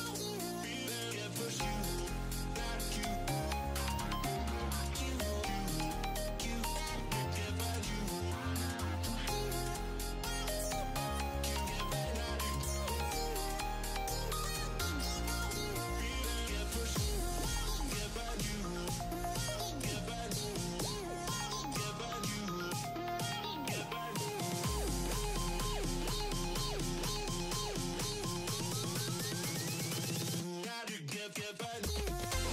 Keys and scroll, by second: 19.1 3, 19.4 0, 23.4 5, 23.8 0.